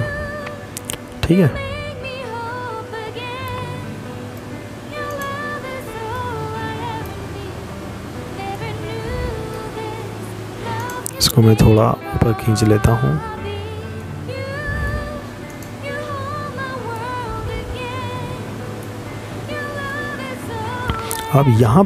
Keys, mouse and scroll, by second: 3.0 right click, 3.9 click, 5.3-5.9 scroll down 5, 6.0 middle click, 8.5 right click, 9.5 click, 11.7 middle click, 13.3 right click, 14.6 click, 17.5 middle click.